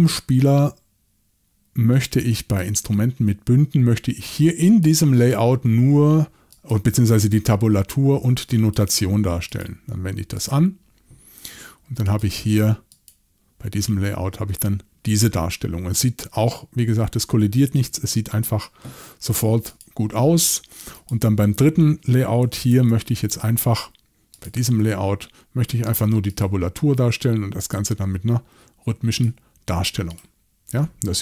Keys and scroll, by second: 16.8 y, 22.7 shift+super+l.